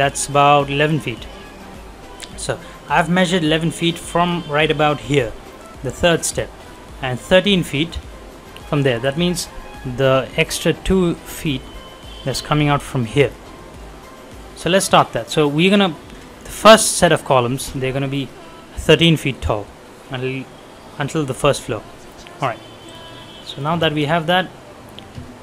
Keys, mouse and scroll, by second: 2.7 scroll up 1, 3.0 middle click, 3.5 scroll down 1, 3.7 middle click, 4.3-4.9 scroll up 1, 5.1 scroll down 1, 5.5 middle click, 5.7-6.2 scroll up 1, 6.2 middle click, 6.3-6.6 scroll down 1, 6.6 middle click, 9.8 middle click, 12.0 scroll up 1, 13.3 scroll down 1, 13.6 middle click, 13.9-14.3 scroll up 1, 14.4 middle click, 14.8-15.4 scroll down 1, 15.4 scroll up 1, 22.8 click, 23.3 middle click, 24.1-25.0 scroll up 1.